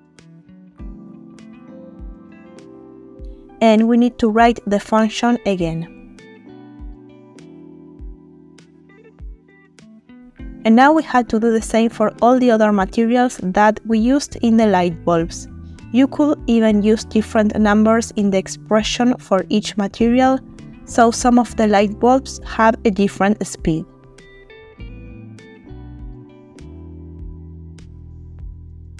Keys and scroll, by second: 6.8 typing, 10.8 space, 16.0 ctrl+v, 17.2 Delete, 24.7 Delete, 28.2 typing.